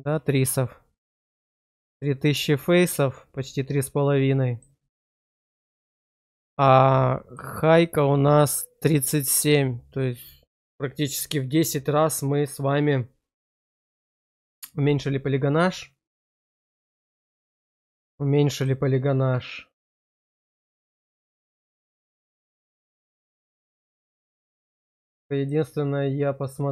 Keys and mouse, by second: 1.7 shift+middle click, 2.8-4.5 middle drag, 6.1 click, 7.2-16.1 drag, 16.1-18.6 middle drag, 25.3 click.